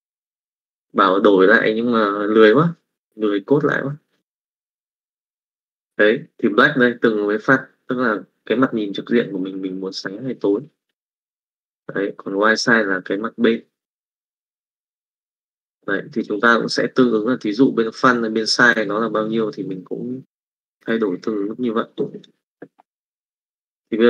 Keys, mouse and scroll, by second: 16.2 middle click, 20.4 middle click, 22.1 click, 23.7 click.